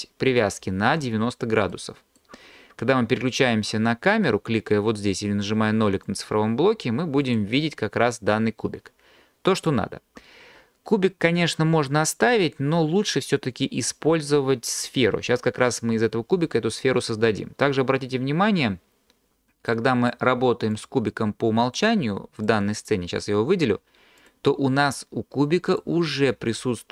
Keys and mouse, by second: 6.1 click, 7.2 click, 9.6 click, 19.7 click, 24.3-25.8 drag.